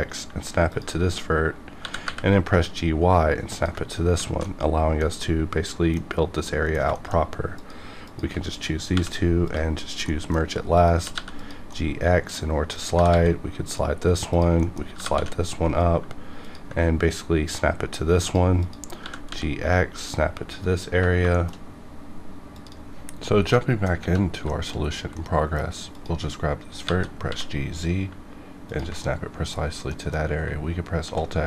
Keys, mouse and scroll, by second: 0.7 ctrl+click, 1.8 g, 2.0 y, 3.4 ctrl+click, 3.9 scroll down 2, 4.2 alt+z, 4.4 alt+middle click, 6.1 scroll up 1, 6.4 middle click, 6.8 scroll down 1, 6.9 shift+middle click, 7.1-7.6 shift+scroll up 2, 7.6 click, 8.0 shift+click, 8.9 m, 9.4 click, 9.7 scroll down 1, 10.1 middle click, 10.4 scroll down 1, 10.7 click, 11.0 g, 11.1 g, 11.4 click, 11.7 middle click, 11.7 middle click, 12.7 click, 12.9 g, 13.1 g, 13.6 click, 14.0-14.3 scroll down 1, 14.3 click, 14.6 middle click, 14.9 g, 15.1 y, 15.9 h, 16.4 ctrl+click, 18.2 click, 19.0 g, 19.9 ctrl+click, 20.4 scroll down 1, 21.0 scroll down 1, 21.3 shift+middle click, 24.4 shift+middle click, 24.7-25.1 scroll up 2, 25.1 middle click, 25.9 click, 26.0 click, 27.0 g, 27.2 z, 28.6 ctrl+click, 28.9 ctrl+middle click, 29.5 scroll down 1, 29.8 middle click, 31.0 alt+x.